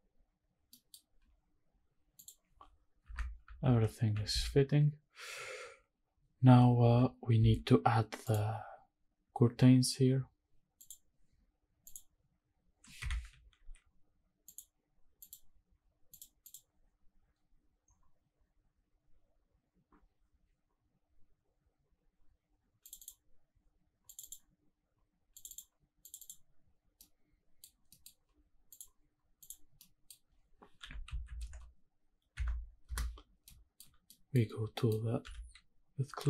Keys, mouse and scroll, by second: 0.7 middle click, 2.2 click, 3.2 shift+middle click, 10.9 click, 11.9-12.8 drag, 13.0 Escape, 13.6 alt+b, 14.5-15.4 drag, 27.0-27.6 middle drag, 27.7 scroll down 1, 27.9 middle click, 28.7 click, 29.4 click, 29.8 middle click, 30.8 r, 31.0 z, 31.2 KP_9, 31.4 KP_0, 32.3 KP_Subtract, 32.9 KP_Enter, 33.5-33.8 shift+middle drag, 34.0 scroll up 1, 34.1 middle click, 34.5 scroll down 1, 34.7 middle click, 35.2 g, 36.1 z.